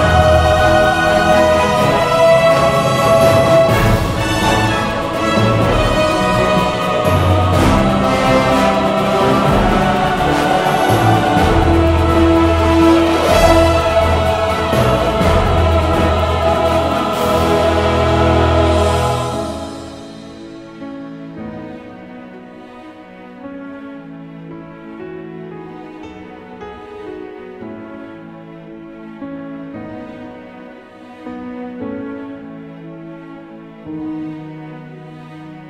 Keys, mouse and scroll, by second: 8.4 shift+a, 10.5 s, 15.4 click, 15.9 click, 16.1-20.1 drag, 20.8 s, 23.3 KP_3, 24.0-29.8 drag, 27.9 shift+a, 30.8 r, 32.6-34.9 drag, 32.6 g, 34.9 middle click.